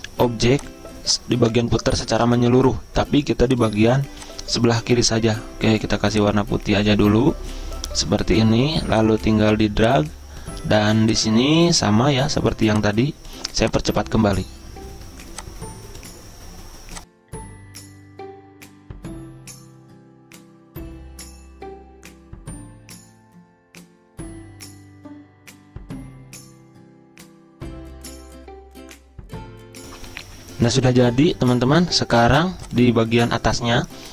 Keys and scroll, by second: 28.2 ctrl+q.